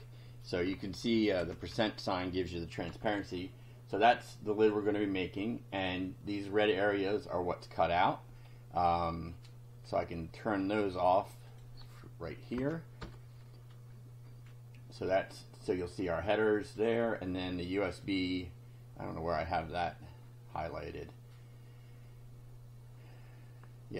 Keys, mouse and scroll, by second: 0.7 Home, 1.0 Right, 1.4 Left, 1.7 Delete, 2.9 F5, 4.0 click, 8.4 scroll down 2, 9.2-9.5 scroll down 2, 9.8 scroll down 2, 10.5 scroll down 2, 11.5 click, 12.5 Left, 13.0 BackSpace, 13.7 F5, 15.9-16.9 drag, 18.0-23.9 drag.